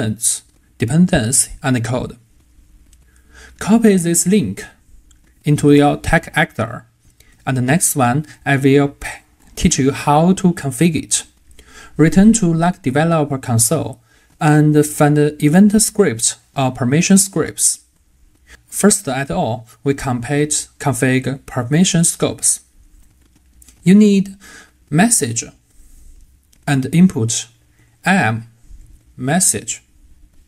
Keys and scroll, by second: 7.7 super+v.